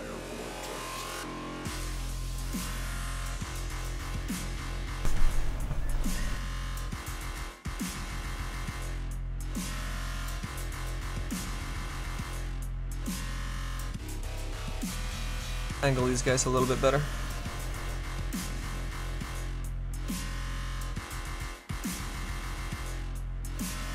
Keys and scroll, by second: 23.1 s.